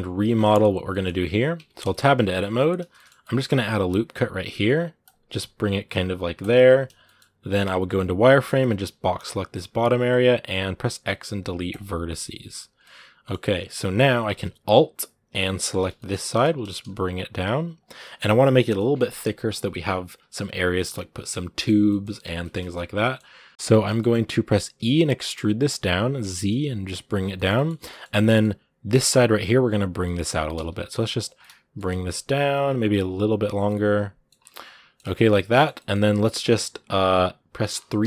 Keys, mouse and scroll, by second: 0.2 shift+middle click, 0.8 scroll up 2, 1.3 Tab, 1.7 shift+middle click, 1.8 scroll up 2, 2.7 shift+middle click, 3.5 ctrl+r, 6.7 scroll down 1, 6.8 middle click, 7.4 z, 12.6-15.4 middle drag, 15.4 alt+right click, 15.6 scroll down 2, 15.7 shift+middle click, 16.3 g, 17.8-22.5 middle drag, 22.5 scroll up 2, 22.8-24.5 middle drag, 24.5 e, 27.1-27.7 scroll down 2, 27.1 shift+middle click, 27.7-30.1 middle drag, 30.1 g, 31.2 middle click, 31.6 g, 33.3 scroll down 1, 33.4 middle click, 34.1 scroll up 5, 34.3-35.8 middle drag, 35.8-36.8 scroll up 2, 37.8 3.